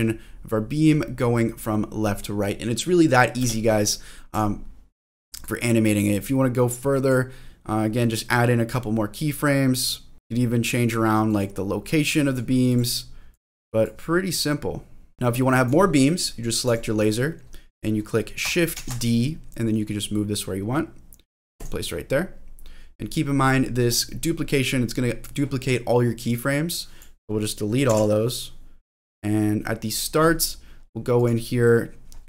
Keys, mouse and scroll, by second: 3.4 space, 4.3 click, 5.5-7.1 drag, 8.7-10.7 drag, 11.3 click, 12.0 click, 12.7 click, 13.3 click, 14.5-15.6 drag, 15.1 space, 16.7 click, 18.8 shift+d, 21.6 click, 23.8 click, 26.3 click, 27.9 Delete, 28.3 click, 31.1 click.